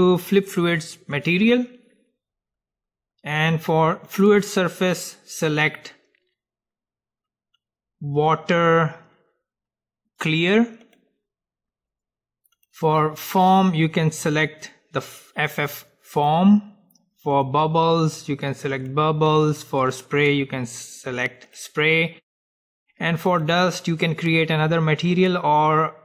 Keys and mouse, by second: 1.3-3.3 drag, 3.0-4.6 middle drag, 4.3-6.2 drag, 12.7-15.5 drag, 17.5-19.5 drag, 20.0-22.0 drag, 23.4-26.0 drag.